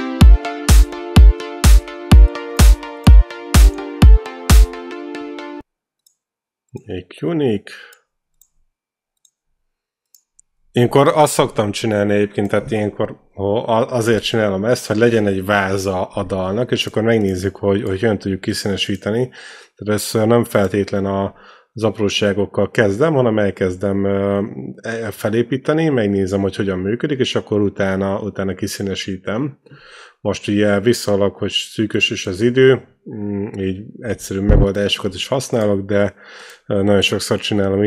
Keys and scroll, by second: 5.4 space, 34.3 c.